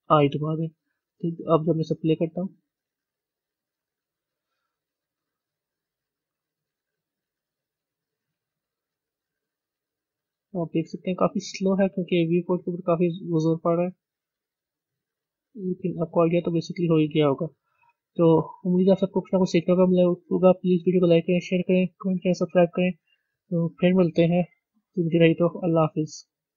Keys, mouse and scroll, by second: 1.8 click, 14.7 click, 16.1 z, 17.2 a, 20.9 z.